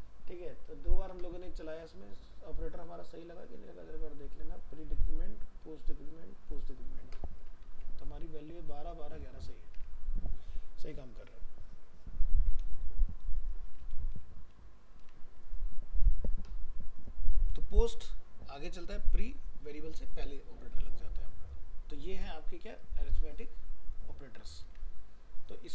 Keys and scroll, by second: 7.7 alt+Tab, 14.2 ctrl+s, 24.6 ctrl+s.